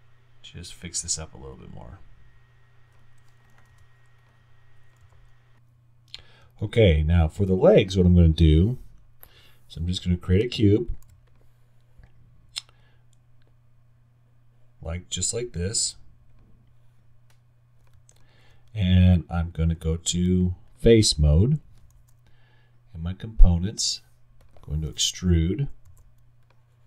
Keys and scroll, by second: 1.0 w, 1.4 w, 3.7 y, 11.1 x, 25.9 r.